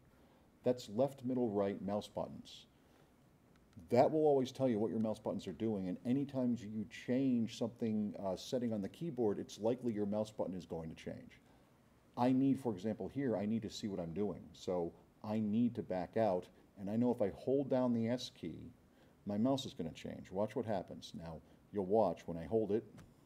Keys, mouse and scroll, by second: 23.0 s.